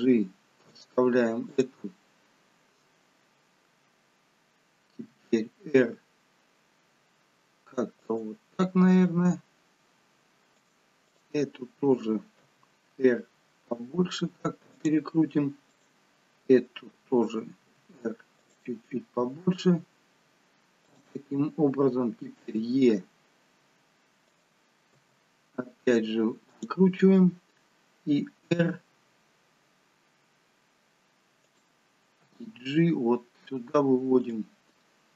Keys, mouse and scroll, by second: 1.5 click, 5.1 r, 8.8 g, 11.0 click, 12.4 r, 15.6 click, 17.6 r, 19.2 g, 22.4 r, 24.9 e, 28.5 r, 32.2 g.